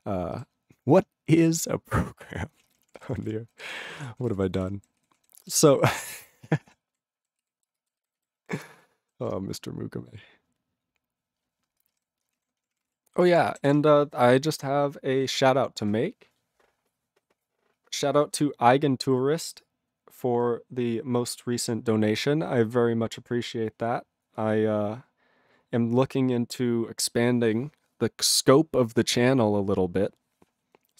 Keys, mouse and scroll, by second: 0.3 ctrl+g, 2.6 ctrl+space, 2.6 ctrl+a, 2.7 ctrl+p, 2.9 ctrl+p, 3.0 ctrl+g, 3.0 ctrl+e, 3.2 ctrl+n, 3.2 ctrl+e, 3.7 ctrl+s, 3.9 ctrl+space, 4.1 ctrl+p, 4.2 ctrl+g, 4.3 ctrl+e, 4.4 ctrl+n, 4.5 ctrl+n, 4.5 ctrl+e, 5.0 ctrl+s, 5.2 ctrl+a, 5.3 ctrl+space, 5.7 ctrl+alt+f, 6.0 ctrl+alt+f, 6.9 ctrl+g, 7.4 ctrl+s, 7.7 ctrl+space, 8.1 ctrl+alt+b, 8.2 ctrl+alt+b, 8.8 ctrl+g, 9.2 ctrl+s, 11.9 ctrl+space, 12.0 ctrl+g, 12.3 ctrl+space, 12.3 ctrl+a, 12.6 ctrl+p, 12.7 ctrl+p, 12.8 ctrl+g, 12.9 ctrl+e, 13.1 ctrl+n, 13.2 ctrl+n, 13.3 ctrl+e, 13.7 ctrl+s.